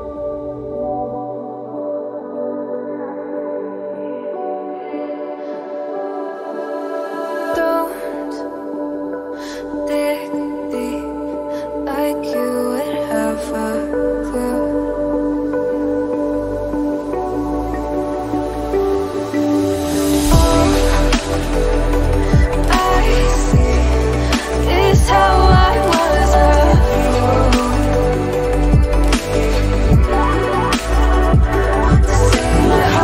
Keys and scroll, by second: 28.4 v, 28.9-29.7 Up.